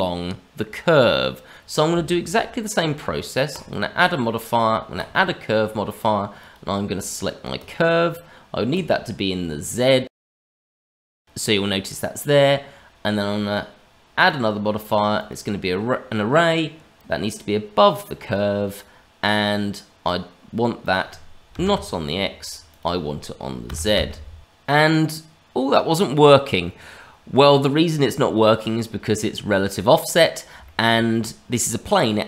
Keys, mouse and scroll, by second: 5.1 click, 6.4 click, 8.7 click, 10.6 shift+middle click, 10.8 middle click, 15.2 click, 16.9 click, 20.8 click, 22.6 click, 24.4 click, 30.2 scroll up 2, 30.6 shift+middle click, 31.1-32.2 scroll up 2.